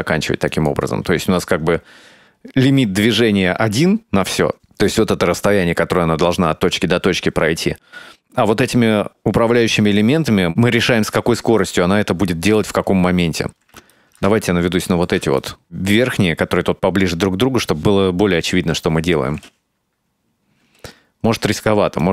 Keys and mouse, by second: 0.5 click, 10.1-12.2 ctrl+middle drag, 13.8 shift+middle click, 14.2 ctrl+middle click, 14.8 shift+middle click, 19.4 space, 20.7 space, 21.3 s.